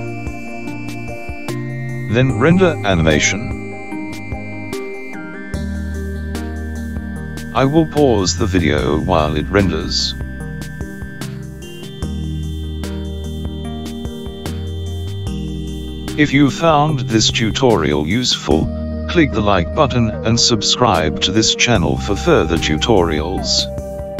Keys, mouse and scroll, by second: 2.6 click.